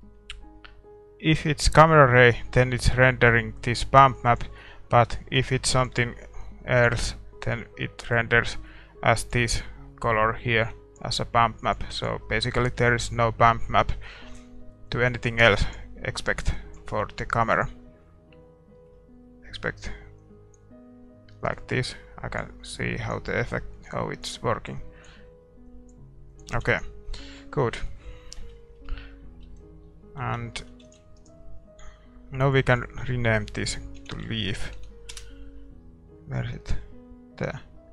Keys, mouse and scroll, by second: 10.7 click, 11.6-19.3 drag, 18.7-20.8 middle drag, 20.5-28.2 drag, 26.5 ctrl+s, 26.9-28.2 middle drag, 28.4 Tab, 29.5 Tab, 30.2 shift+z, 30.6-35.1 middle drag, 31.2 ctrl+s, 31.2-35.1 right drag.